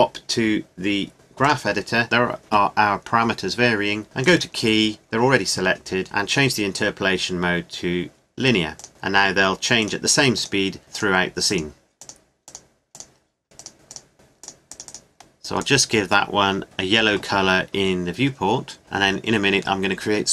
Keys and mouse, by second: 4.2-6.0 drag, 9.9-12.8 drag, 13.7 click, 18.8-20.3 middle drag.